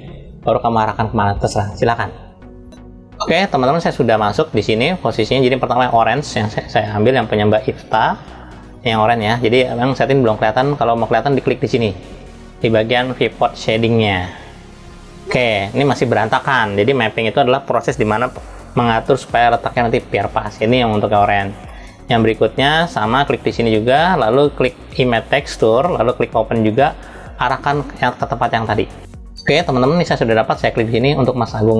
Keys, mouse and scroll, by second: 14.2 click, 20.2 drag, 20.9 drag, 21.4 click, 23.3-25.0 drag, 26.9 click.